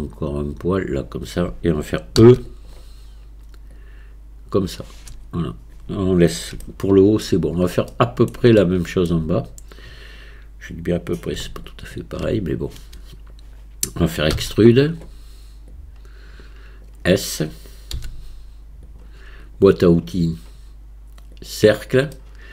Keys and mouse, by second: 2.2 e, 3.7 click, 6.7 shift+click, 7.9 click, 8.6 shift+click, 14.4 e, 15.8-16.9 drag, 17.9 s, 19.4-21.5 drag, 22.2-22.5 middle drag.